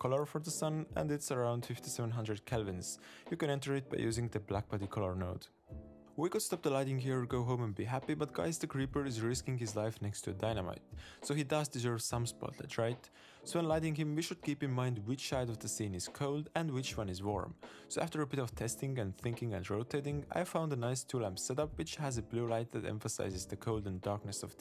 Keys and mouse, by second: 3.5 shift+a, 5.1 click, 6.2-7.5 drag, 6.7 7, 9.4-10.7 drag, 11.8-13.3 drag, 18.4 g, 19.1 middle click, 19.4 middle click, 19.6 shift+middle click, 19.7 shift+middle click, 19.8-21.4 typing, 20.5 click, 21.0 click, 21.2 click, 21.7 middle click, 22.1 click, 23.0-24.6 drag.